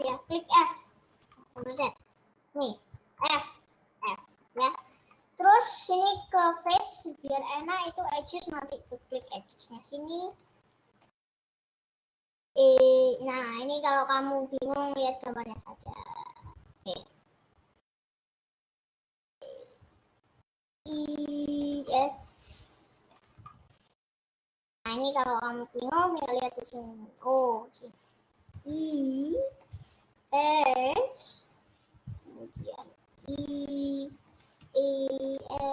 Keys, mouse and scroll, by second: 1.7 ctrl+z, 3.1 f, 4.5-5.7 middle drag, 5.7 click, 7.4 click, 8.4 click, 9.6 click, 10.3 click, 11.5-14.8 middle drag, 20.8 e, 22.0 s, 23.5 ctrl+z, 24.0 ctrl+z, 28.7 i, 30.4 click, 33.5 e, 35.1 e, 35.6 s.